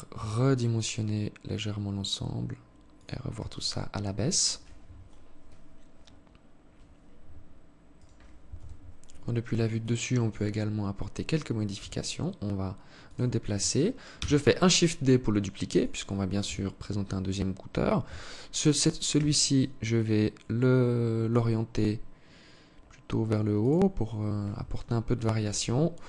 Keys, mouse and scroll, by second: 2.7 Tab, 7.2 right click, 7.8 KP_7, 8.9 alt+shift+click, 9.8-10.5 scroll down 2, 11.0 g, 13.3 shift+d, 15.6 KP_3, 16.5-17.2 scroll up 1, 17.2 Tab, 18.3 r, 24.6 KP_7.